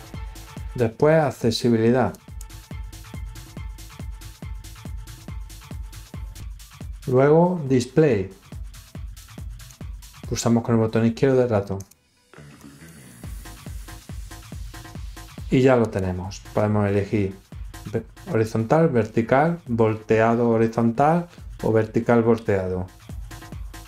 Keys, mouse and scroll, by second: 2.1 click, 9.1 click, 11.7 click, 12.5 click, 12.9 click, 15.7 click.